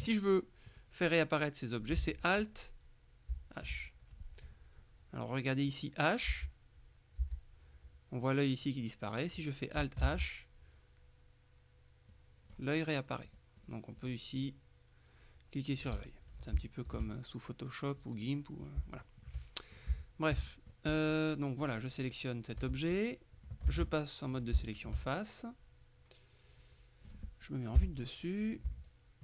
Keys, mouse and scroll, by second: 3.4 alt+h, 6.4 h, 7.3 h, 10.1 alt+h, 12.2 click, 13.3-15.0 drag, 16.3-16.7 scroll down 3, 16.7 shift+middle click, 18.1 click, 19.0-19.3 shift+scroll down 2, 19.3 shift+middle click, 20.0 shift+middle click, 20.5 middle click, 21.0 right click, 21.7-22.2 scroll up 1, 22.6-23.1 scroll up 1, 22.7 Tab, 23.1 middle click, 23.8 ctrl+Tab, 24.4 ctrl+shift+click, 25.2 shift+middle click, 27.9 KP_7, 28.8-29.2 shift+middle drag.